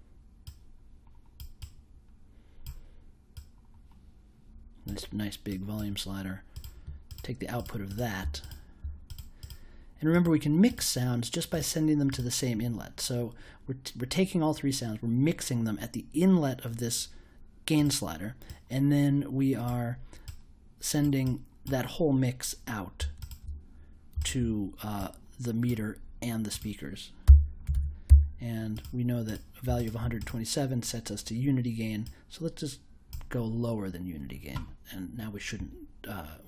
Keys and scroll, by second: 27.0-28.5 typing.